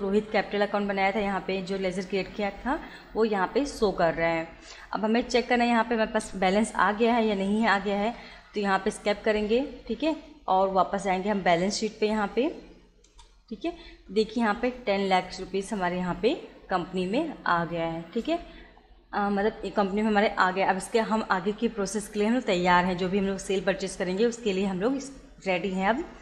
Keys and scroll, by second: 7.6 Escape, 11.6 Down, 13.1 Return, 25.8 Escape.